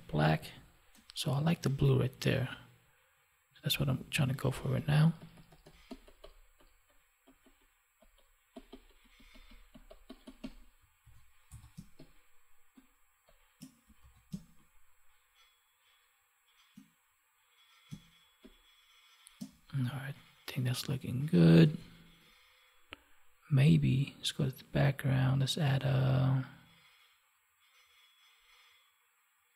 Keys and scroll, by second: 10.9 ctrl+s, 11.7 space, 14.0 ctrl+s, 14.2 space, 21.6 ctrl+=.